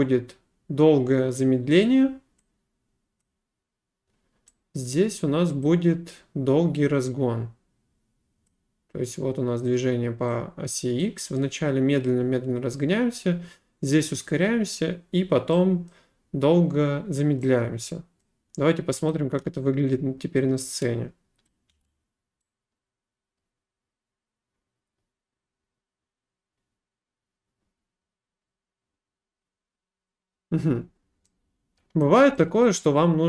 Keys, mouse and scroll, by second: 3.2 click, 4.9 middle click, 8.5 click, 11.0 click, 15.9 middle click, 18.2 right click, 19.1 click, 21.5 click, 21.7 space, 31.3 middle click, 31.7 click.